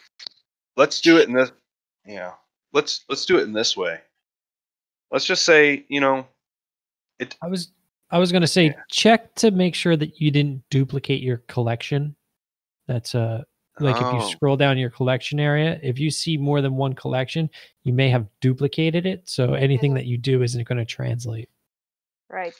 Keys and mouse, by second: 4.2 middle click, 4.9 ctrl+middle drag, 5.4 shift+middle drag, 5.7 middle drag, 6.1 shift+middle drag, 6.5-6.8 middle drag, 7.1 shift+middle click, 7.3-8.0 alt+middle drag, 8.2 shift+middle drag, 8.6 ctrl+middle drag, 9.0 shift+middle drag, 9.4-9.8 drag, 15.6 click.